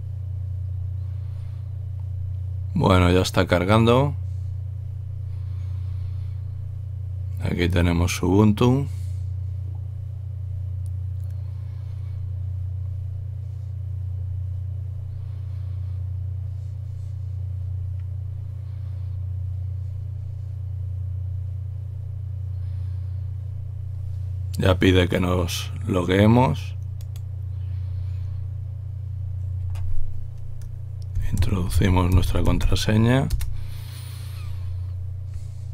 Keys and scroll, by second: 31.0-33.1 typing, 33.3 Return.